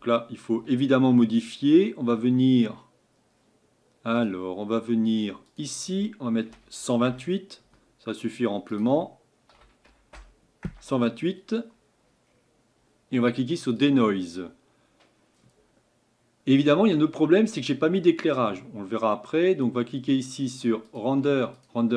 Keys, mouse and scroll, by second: 7.1-13.9 drag.